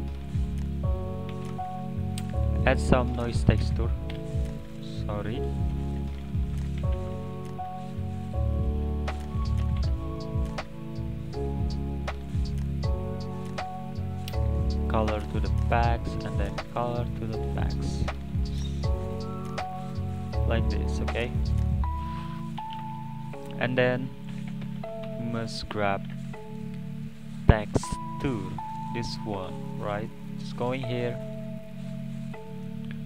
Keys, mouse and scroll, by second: 0.8 click, 1.1 click, 2.0 shift+a, 5.6 click, 5.7 x, 7.4 shift+a, 13.6-14.2 scroll up 5, 15.3-18.5 drag, 19.0-20.9 drag, 20.9-21.9 middle drag, 21.9 click, 22.8 shift+a, 30.5-31.5 drag, 31.5 middle click, 32.3 click.